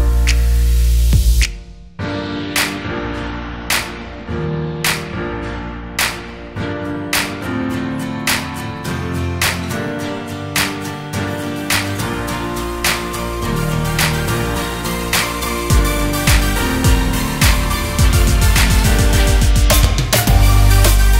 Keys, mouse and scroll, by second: 1.2-1.5 scroll up 1, 3.0-4.6 drag, 4.9 scroll down 1, 5.6 s, 8.1-10.0 drag, 11.3 s, 16.9-18.5 drag, 18.5 s.